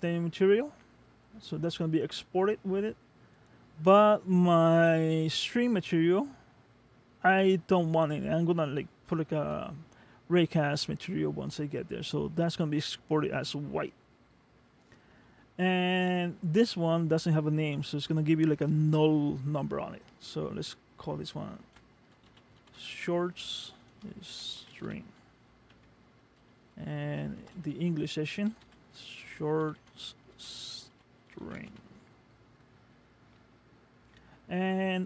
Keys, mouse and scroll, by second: 1.2-3.5 scroll up 10, 3.5 click, 18.1 click.